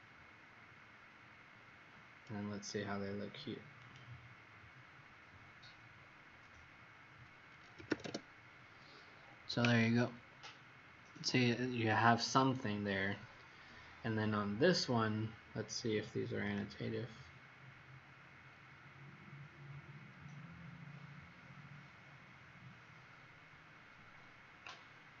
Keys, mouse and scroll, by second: 0.9 scroll up 1, 3.8 click, 6.0-6.5 scroll up 3, 7.4-8.3 typing, 13.2 scroll down 1, 16.4 click, 18.7 middle click, 20.3-20.6 scroll up 4, 21.1-22.5 scroll up 8.